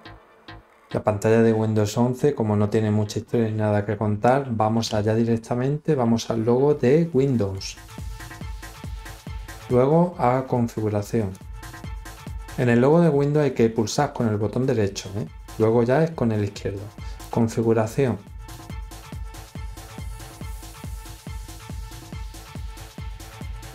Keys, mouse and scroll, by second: 7.5 right click, 11.3-17.1 drag, 18.4 click.